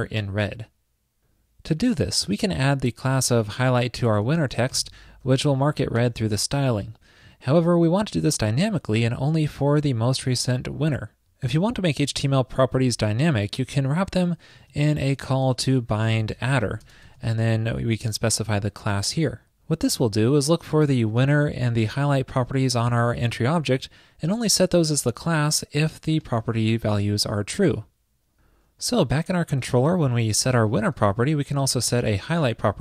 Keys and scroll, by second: 5.4 alt+shift+Left, 13.6 alt+shift+Left, 13.8 alt+shift+Left, 14.8 super+x, 17.2 super+v, 31.0 ctrl+shift+d.